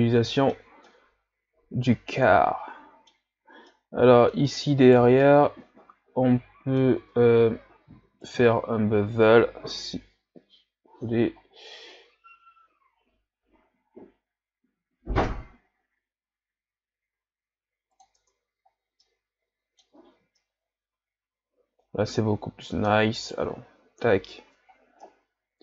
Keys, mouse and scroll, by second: 3.2 scroll up 2, 3.7-4.9 middle drag, 4.9 right click, 5.3-7.0 middle drag, 7.0 Tab, 8.2 alt+right click, 9.6 ctrl+b, 18.2 Tab, 18.8 scroll down 1, 19.0-19.9 middle drag, 19.9 a, 20.4-23.2 middle drag, 23.2 right click, 24.0 KP_Divide, 24.8 scroll down 2, 25.1-25.6 middle drag.